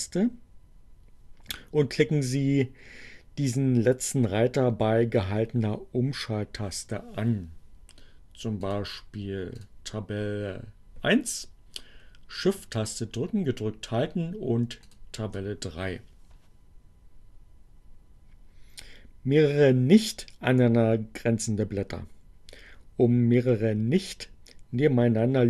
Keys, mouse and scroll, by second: 8.5 click, 9.6 click, 14.7 shift+click.